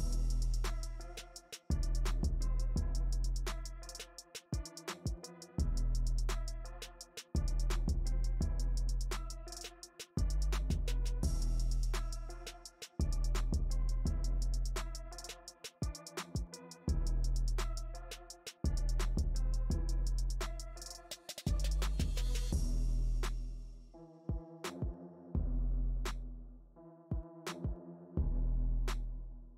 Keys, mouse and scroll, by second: 8.4 shift+c, 9.0 f, 10.4 click, 11.2 f, 12.3-13.8 drag, 13.8-17.2 middle drag, 17.2 KP_Decimal, 18.7 KP_Decimal, 20.1-22.7 middle drag, 22.7 KP_Decimal, 24.1-28.5 middle drag, 28.5 shift+c.